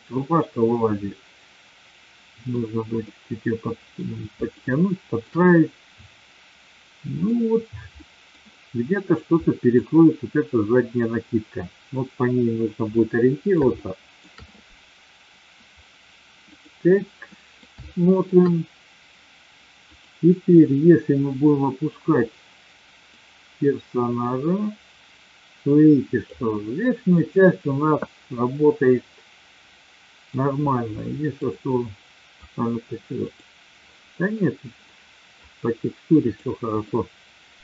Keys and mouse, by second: 0.4-2.6 middle drag, 3.0-3.9 middle drag, 4.4-5.2 shift+middle drag, 5.4-7.3 middle drag, 7.9-8.3 middle drag, 9.4 middle drag, 12.9-14.2 middle drag, 16.4 click, 17.3 middle drag, 17.8-18.2 shift+middle drag, 23.2-26.3 drag, 27.2-30.2 middle drag, 30.9-31.4 middle drag, 33.2 click, 36.2 click, 36.8-37.6 middle drag.